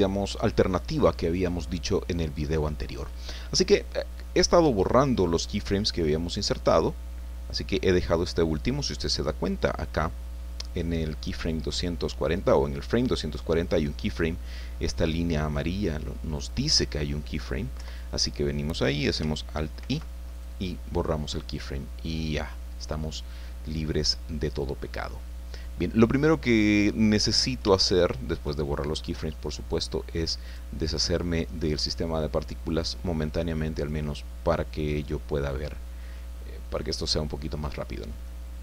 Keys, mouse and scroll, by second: 16.3 click, 17.7 Left, 19.8 alt+i, 20.3 alt+click, 21.9 scroll down 2, 22.3 click, 23.0-23.3 scroll down 2, 23.3-26.7 drag, 26.8-27.6 scroll up 3, 27.7 shift+click, 30.4 right click, 31.6 middle click, 32.7 click, 33.8 click, 34.9 scroll down 2, 35.3-37.6 middle drag, 37.7 scroll down 2, 38.2 middle click.